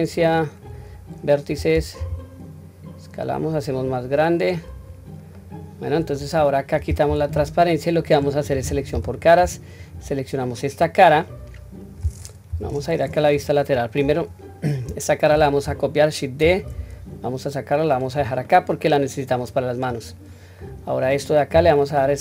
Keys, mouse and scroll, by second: 0.2-0.7 drag, 2.0 s, 4.8-5.3 scroll down 1, 5.3-6.1 middle drag, 6.4-7.0 scroll down 1, 7.0 q, 7.4-8.2 middle drag, 8.9 3, 9.8 click, 10.4-11.1 middle drag, 11.6-12.0 scroll down 1, 12.5 KP_1, 13.3-14.0 scroll up 1, 14.0 scroll up 1, 14.2 shift+middle click, 16.4 shift+d, 18.5-19.4 middle drag, 19.9 click, 20.5 middle click, 21.5 s.